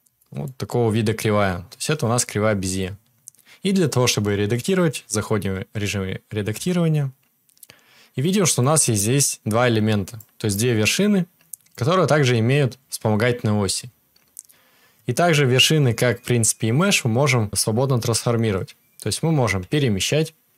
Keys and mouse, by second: 6.5 Tab, 19.6 g.